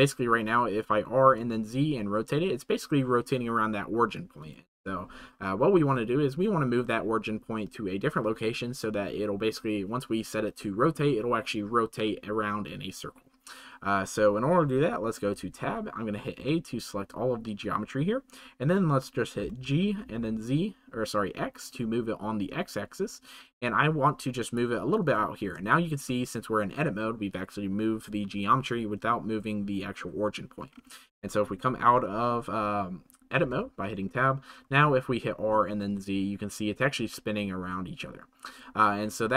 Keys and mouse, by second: 24.4 click, 25.7 shift+middle click, 31.0-38.9 middle drag.